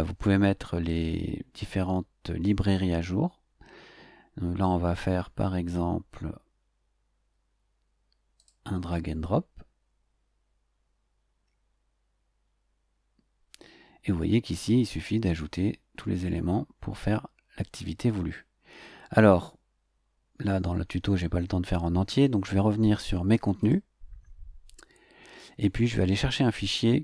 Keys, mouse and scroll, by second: 5.7-6.0 scroll down 2, 8.3 click, 14.3 scroll down 2, 15.5-15.8 scroll down 2, 16.2-18.4 scroll down 4, 18.4-19.4 scroll up 2, 19.9-20.3 scroll up 2, 23.6 click.